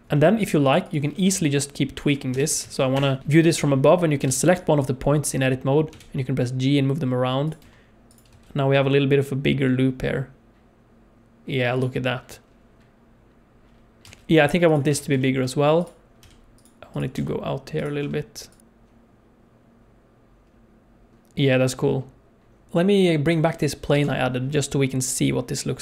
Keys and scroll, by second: 0.0 space, 1.3 Tab, 2.3 g, 3.2 KP_7, 4.2 alt+a, 5.9 g, 7.6 Tab, 8.3 space, 14.0 space, 14.9 Tab, 16.2 g, 17.1 g, 18.0 Tab, 22.7 space, 23.9 KP_0.